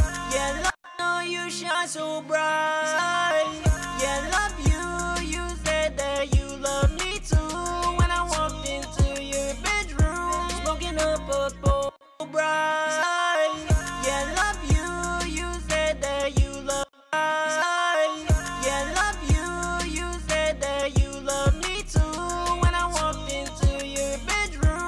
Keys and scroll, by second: 1.6 shift+-, 1.7 shift+-, 5.8 shift+-, 8.4 b, 9.8 b, 16.1 space.